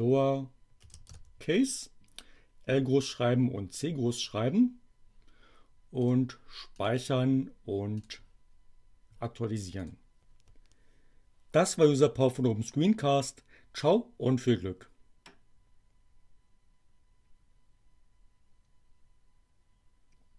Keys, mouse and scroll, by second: 0.8 Delete, 1.0 shift+c, 5.9 click, 6.8 click, 7.9 click, 9.8 click.